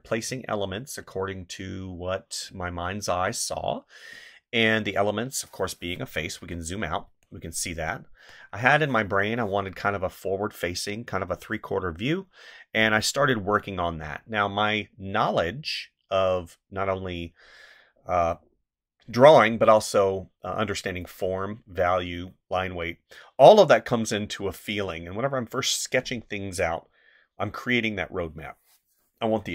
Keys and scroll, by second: 6.1 space, 29.4 space.